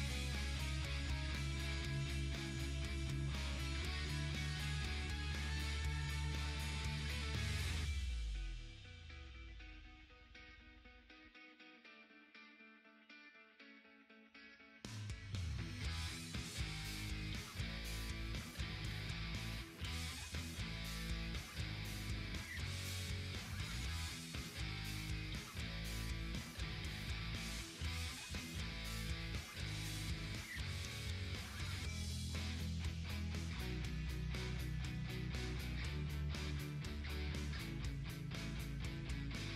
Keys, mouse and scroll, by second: 3.5-5.6 drag, 9.3 click, 15.1-27.2 drag, 29.8-34.6 drag, 34.6-39.4 drag.